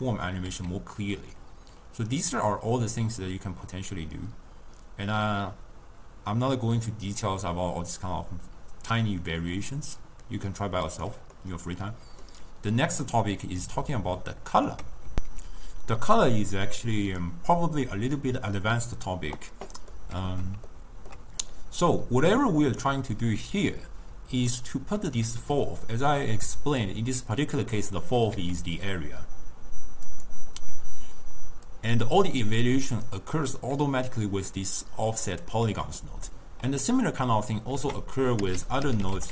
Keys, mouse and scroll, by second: 0.6 s, 11.4-13.1 middle drag, 13.1-13.6 scroll down 1, 13.6-15.1 middle drag, 20.0-21.6 middle drag, 21.6 click, 25.3 drag, 28.4 s, 31.7 click, 35.9-37.8 middle drag, 37.8 ctrl+a, 38.7 f.